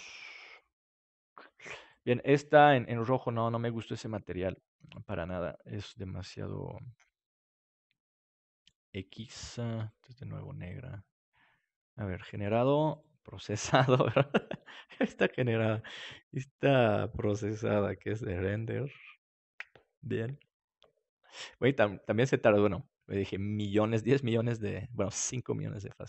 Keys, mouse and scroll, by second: 2.1-7.0 drag, 8.5-10.3 drag, 12.1-15.8 drag.